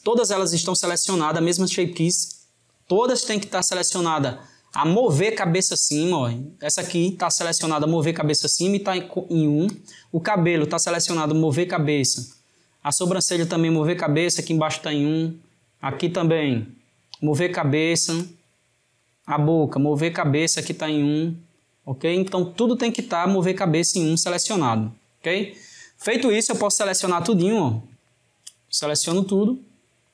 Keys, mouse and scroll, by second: 4.7 click, 9.7 drag, 12.3 click, 15.0 click, 16.4 click, 18.2 drag, 19.1 click, 22.3 click, 27.5 click.